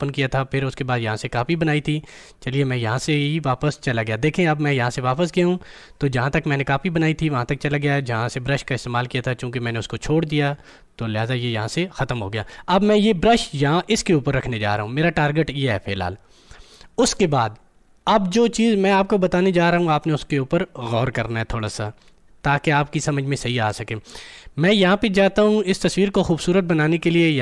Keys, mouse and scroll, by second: 0.8 click, 1.3 click, 14.6 click.